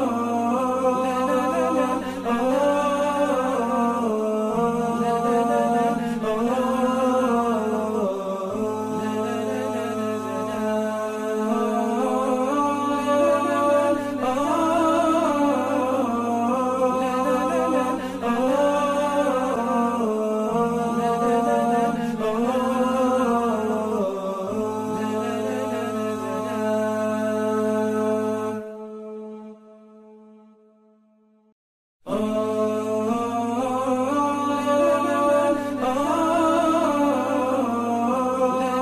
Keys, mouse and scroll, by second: 5.1 alt+scroll up 1, 7.0 scroll down 1, 7.3 scroll up 1, 9.0 space, 9.9 scroll up 1, 11.1-12.4 scroll down 1, 18.7 alt+scroll up 1, 19.3 alt+scroll down 1, 19.7 alt+scroll up 1, 20.6 alt+scroll up 1, 20.8 alt+scroll, 20.9 shift+click, 21.3-21.6 alt+scroll down 2, 21.6 alt+scroll up 1, 22.1 shift+click, 23.2 ctrl+c, 24.7 ctrl+v, 25.0 alt+scroll down 1, 25.3 alt+scroll up 1, 26.4 ctrl+g, 32.7-33.0 alt+scroll down 1, 33.0-33.4 alt+scroll up 1, 33.9 space, 35.4-35.7 alt+scroll down 1, 36.1 space, 38.6 alt+scroll up 1.